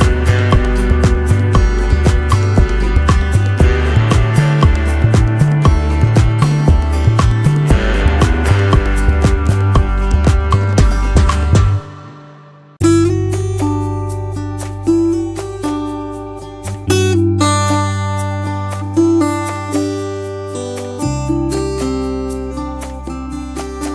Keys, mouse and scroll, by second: 1.9 t, 2.9 Return, 6.6 t, 12.4 click, 13.1 alt+Up, 22.8 shift+click.